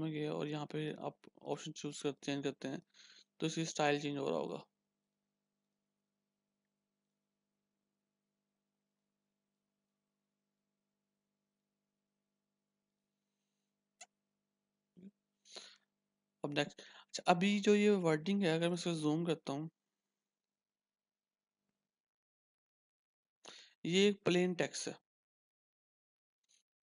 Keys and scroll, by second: 19.9 ctrl+=, 20.2 ctrl+=, 20.4 ctrl+=, 20.6 ctrl+=, 22.6 ctrl+-, 22.6 h.